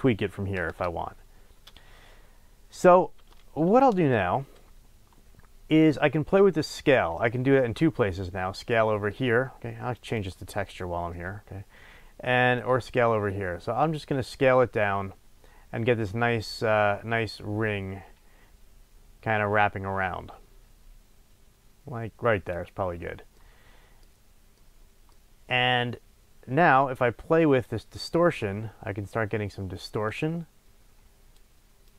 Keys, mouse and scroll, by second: 0.7 KP_1, 0.8 Return, 3.3-7.7 middle drag, 4.3-5.4 scroll up 2, 5.4-7.1 scroll up 1, 7.1 scroll up 1, 7.7 scroll down 1, 10.0 click, 10.6 scroll down 1, 12.5-23.3 drag, 23.3-27.6 middle drag, 27.6-31.9 drag.